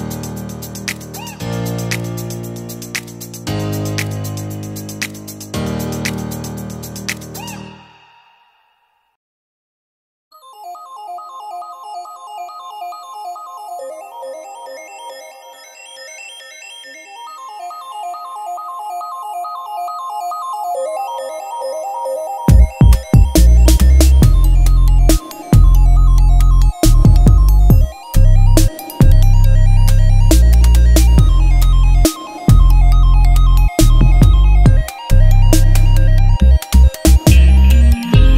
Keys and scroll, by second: 10.6 Return, 14.3 ctrl+t, 14.8 Right, 17.0 Return, 17.9 t, 22.2 shift+v, 22.9 s, 24.0 space, 25.0-26.8 typing, 27.3 ctrl+Return, 29.3 r, 29.6 h, 29.9 Return, 33.6 F9, 35.3 t.